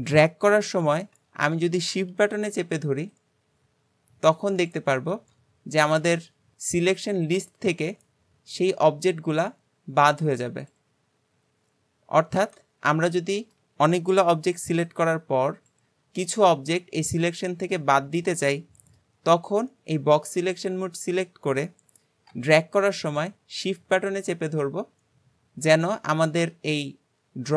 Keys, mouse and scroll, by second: 13.1-14.3 middle drag, 14.3 b, 16.5-19.3 middle drag, 19.3 b.